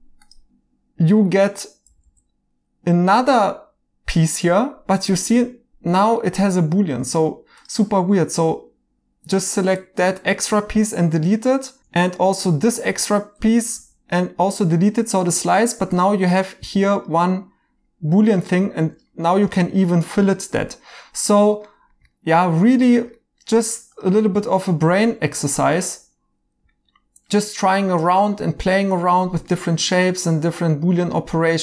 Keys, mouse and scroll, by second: 1.9 g, 2.0 g, 6.8 Escape, 10.1 x, 11.8 ctrl+z, 11.8 x, 13.7 y, 14.7 right click, 16.6 2, 19.1 Escape, 19.5 right click, 21.6 right click, 25.1 2, 27.4 Escape, 27.6 right click, 29.5 right click, 31.1 Escape.